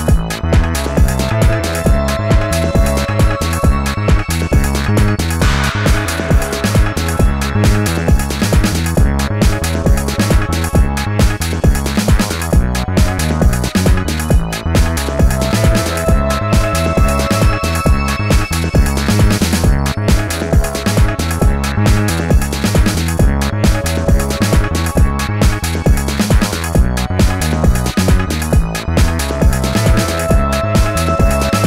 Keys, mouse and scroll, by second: 7.0 space, 8.7 alt+scroll up 1, 13.0 alt+click, 15.7 alt+shift+click, 29.1 shift+click, 31.1 alt+scroll down 1.